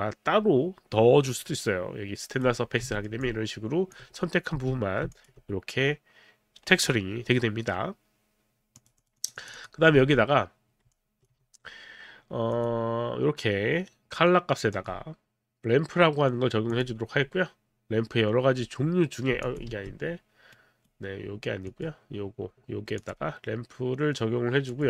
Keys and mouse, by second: 3.0 alt+middle click, 3.2 alt+click, 4.5 w, 5.1 alt+click, 8.8 click, 9.0 click, 9.2 click, 10.0 w, 10.9 alt+click, 11.2 alt+click, 12.5 click, 14.7 click, 16.7 click, 19.4 alt+click, 19.7 z, 20.5 right click, 21.7 click, 23.0 click, 24.7 click.